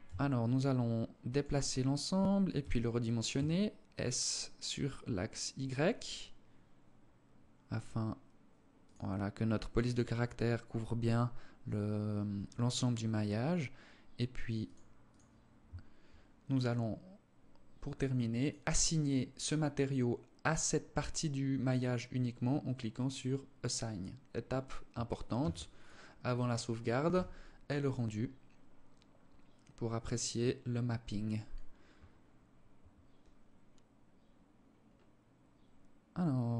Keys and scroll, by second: 24.6 ctrl+s.